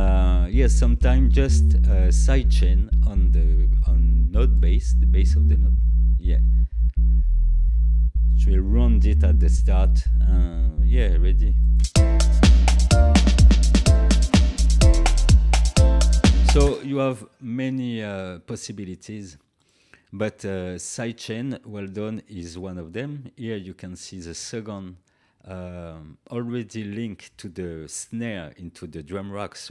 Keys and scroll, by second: 16.6 space.